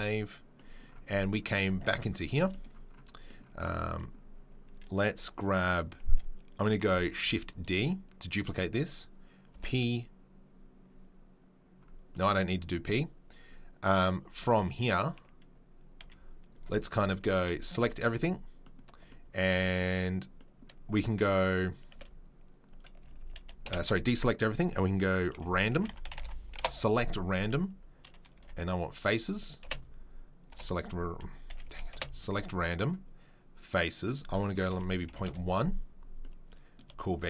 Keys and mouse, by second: 0.0-21.9 middle drag, 7.1 shift+d, 9.5 p, 14.3 Tab, 16.0 z, 17.1 a, 22.6-33.9 middle drag, 22.6 space, 23.0 a, 23.1 a, 23.7 space, 29.7 space, 31.5 a, 31.6 a, 31.9 space, 33.9-37.2 drag.